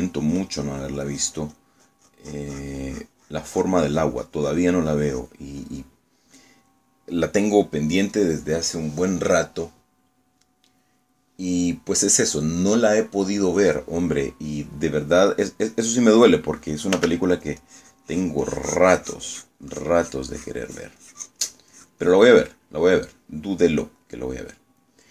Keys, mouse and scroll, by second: 0.4-2.8 drag, 7.0 middle click, 7.7 middle click, 12.6 click, 12.8 scroll up 1, 12.8 scroll down 1, 13.0 scroll up 1, 14.8 click, 14.9 scroll down 2, 15.0 scroll up 1, 15.1 scroll down 1, 15.1 scroll up 2, 15.3 scroll down 2, 15.3 middle click, 16.8 click, 17.4 middle click, 18.0 f, 18.4-23.8 drag, 24.7-25.1 middle drag.